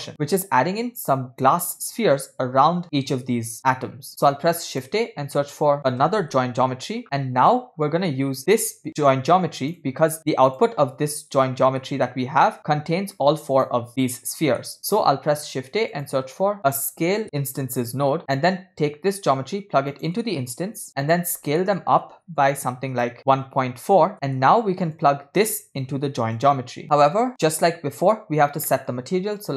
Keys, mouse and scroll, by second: 0.1 shift+a, 4.1 shift+a, 8.4-9.7 drag, 10.2 click, 11.6-12.8 scroll up 6, 11.8 middle click, 13.0-13.5 drag, 14.4-14.8 scroll down 2, 14.6 middle click, 15.2 shift+a, 19.2-20.1 drag, 20.9-21.3 drag, 21.6 middle click, 21.9-22.4 scroll up 2, 22.5-24.1 drag, 24.1 middle click, 24.1-24.4 scroll down 3, 25.0 click, 26.4 click, 26.8-27.3 middle drag, 27.4 middle click, 27.7-28.6 scroll up 2, 28.6 scroll down 1, 28.7 middle click, 29.3 click.